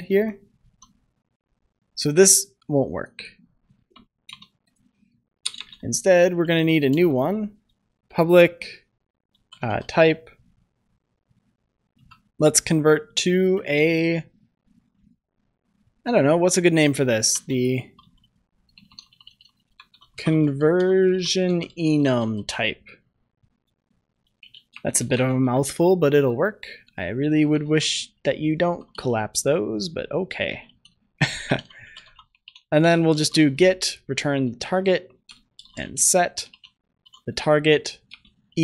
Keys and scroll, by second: 0.5 ctrl+s, 4.0 ctrl+c, 24.1 Return, 38.1 Return.